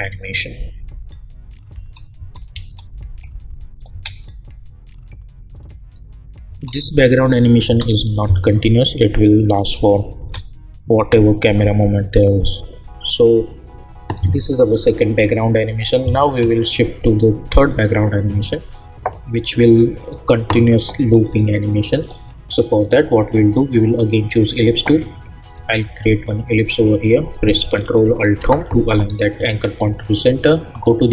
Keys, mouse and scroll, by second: 1.7 space, 3.2 click, 3.9 space, 6.4 space, 7.1 click, 7.7 space, 10.2 space, 13.6-16.4 drag, 16.9 click, 19.9 click, 23.3-28.3 drag, 28.3 ctrl+alt+Home, 30.7 click.